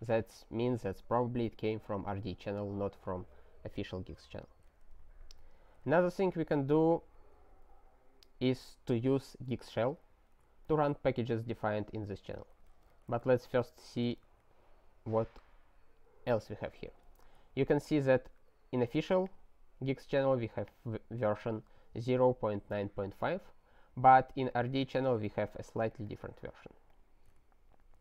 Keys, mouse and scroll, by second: 5.2 alt+w, 6.9 ctrl+n, 7.1 ctrl+a, 7.7 ctrl+n, 9.7 ctrl+space, 9.9 ctrl+n, 10.0 ctrl+e, 10.7 alt+w, 12.3 ctrl+p, 12.5 ctrl+p, 12.7 ctrl+a, 12.8 ctrl+space, 12.9 ctrl+e, 13.2 alt+w, 13.5 click, 14.1 ctrl+y, 14.3 Return, 19.0 click, 19.1 double click, 19.3 click, 20.5 click, 20.7 double click, 24.5 click, 24.6 double click, 24.8 click, 25.9 click, 26.0 double click, 26.1 double click, 26.2 click, 26.9 click.